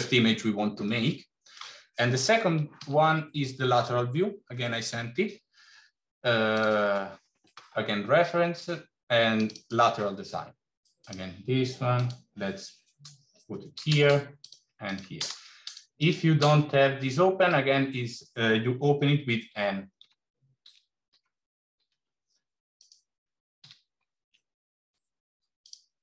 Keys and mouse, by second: 0.9-1.4 middle drag, 2.7 shift+a, 10.8 click, 11.9-14.4 drag, 14.7 click, 15.8-17.3 drag, 19.3 n, 19.9 n, 22.7 click, 23.5 g, 25.8 click.